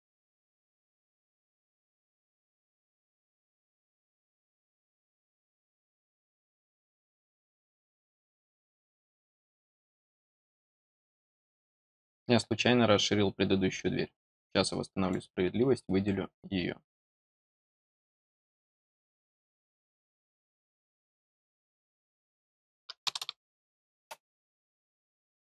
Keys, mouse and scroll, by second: 3.6 click, 8.2 click, 10.2 click, 14.9 click, 17.5 click, 20.5 click, 21.7 click, 25.2 middle click.